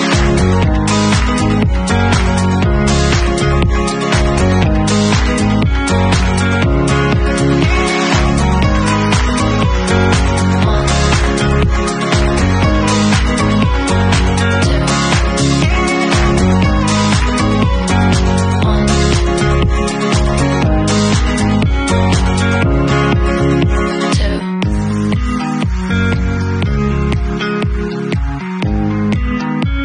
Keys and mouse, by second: 1.5-2.3 middle drag, 3.3-5.1 middle drag, 5.1-16.1 drag, 7.3 e, 10.2 w, 14.3 middle click, 14.3 right click, 14.6 middle click, 14.6 right click, 16.1-27.4 middle drag, 26.7 KP_Decimal, 27.4 click, 27.5 middle click, 27.6-28.2 right drag, 29.3 ctrl+z.